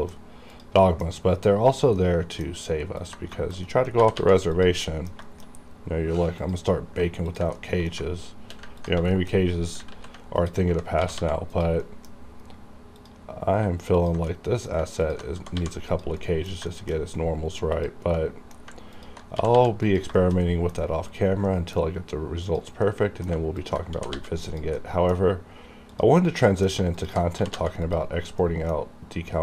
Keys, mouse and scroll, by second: 0.5 click, 0.9 middle click, 1.7 click, 2.0 middle click, 3.0 ctrl+click, 3.1 ctrl+click, 3.3 scroll down 1, 3.4 shift+middle click, 3.7 middle click, 4.1 g, 4.2 g, 4.6 click, 4.9 middle click, 5.3 shift+middle click, 5.7-6.3 scroll up 1, 6.4 click, 6.5 click, 7.3 ctrl+click, 8.0 middle click, 8.9 ctrl+click, 9.2 ctrl+shift+middle click, 10.0 ctrl+z, 10.4 ctrl+click, 11.0 g, 11.2 g, 11.6 click, 11.9 middle click, 11.9 middle click, 13.0 click, 14.0 ctrl+click, 14.4 middle click, 15.1 ctrl+click, 15.1 ctrl+click, 15.4 g, 15.6 g, 16.0 click, 16.3 middle click, 16.7 shift+middle click, 17.7 click, 17.8 click, 18.2 middle click, 19.0 ctrl+click, 19.4 g, 19.6 g, 19.9 click, 20.2 shift+middle click, 20.4 shift+scroll down 1, 20.5 middle click, 20.9-21.5 scroll up 1, 21.5 middle click, 22.5 click, 22.9 middle click, 22.9 middle click, 23.7 ctrl+click, 24.0 g, 24.1 g, 24.5 click, 24.8 middle click, 25.9 click, 26.0 click, 26.3 middle click, 27.0 ctrl+click, 27.3 g, 27.6 g, 27.9 click, 28.2 scroll down 1, 28.5 middle click.